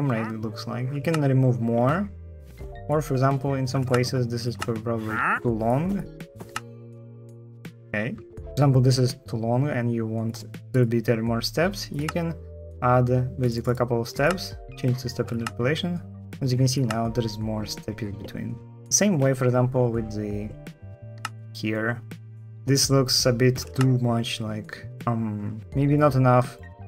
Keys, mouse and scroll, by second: 0.8 space, 3.6 space, 4.3 space, 6.3 shift+t, 7.2 Escape, 15.2 space, 16.6 space, 20.9 space, 23.5 space.